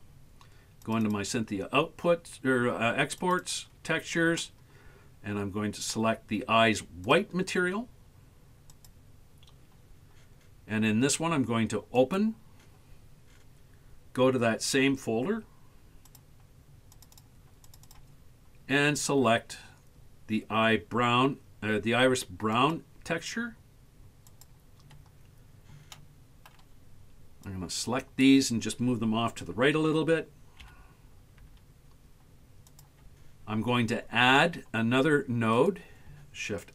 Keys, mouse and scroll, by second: 12.0 click, 26.0 shift+middle click, 27.5 click, 30.7 g, 35.5 right click.